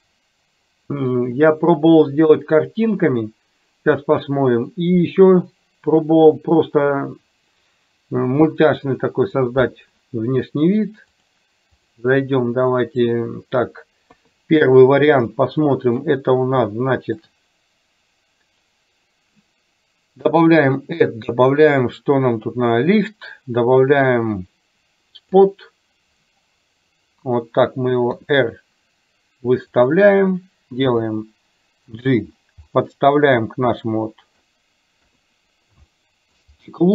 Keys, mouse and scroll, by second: 1.5-4.0 middle drag, 11.3 click, 12.3-13.1 middle drag, 14.2 KP_3, 15.3-16.0 shift+middle drag, 16.7-17.2 middle drag, 20.6-25.5 drag, 28.2 r, 31.1 g, 32.7-34.6 middle drag, 35.1 KP_3, 36.0-36.5 shift+middle drag.